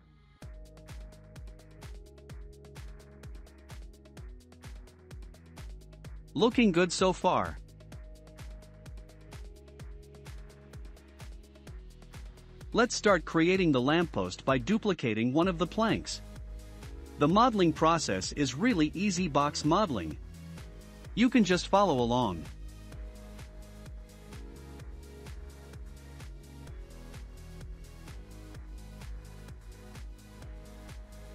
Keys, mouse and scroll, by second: 0.7 Tab, 1.0 click, 1.6-1.9 scroll down 4, 2.3-3.2 shift+middle drag, 2.3 scroll down 2, 3.2-3.8 scroll down 2, 3.8-4.9 shift+middle drag, 4.9-5.3 scroll down 2, 5.3-8.8 shift+middle drag, 11.1-11.9 middle drag, 12.6-13.1 scroll down 1, 13.1-14.3 middle drag, 14.3 click, 14.7-15.3 middle drag, 15.3-16.1 scroll up 2, 16.2-17.2 middle drag, 17.2 shift+d, 19.3-21.6 middle drag, 21.6 KP_Decimal, 22.5 scroll down 5, 23.1-24.0 shift+middle drag, 24.0 r, 27.3 r, 30.2-31.1 shift+middle drag.